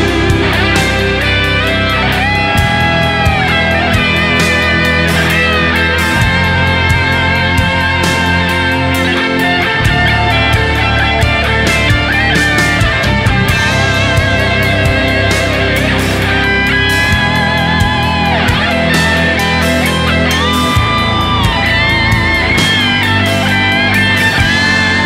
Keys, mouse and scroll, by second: 0.6 right click, 1.2 typing, 2.6-3.7 typing, 4.0 double click, 5.3 right click, 7.4 typing, 7.8 shift+double click, 8.0 shift+click, 8.4-9.7 typing, 8.6 double click, 10.7 right click, 10.8 typing, 11.6 right click, 12.5-13.0 typing, 14.5-14.9 typing, 14.6 double click, 16.0 right click, 17.2-17.8 typing, 18.8 alt+right click, 18.8 alt+right click, 20.9 alt+right click, 22.1 alt+click, 22.2 typing, 23.7 w, 23.9 alt+click.